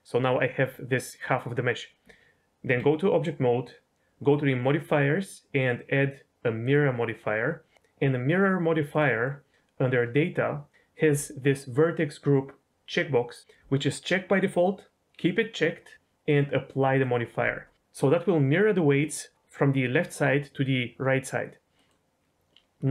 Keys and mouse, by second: 2.0 Tab, 4.7 click, 5.6-6.7 drag, 8.9 click, 16.2-17.0 drag, 21.7 middle click.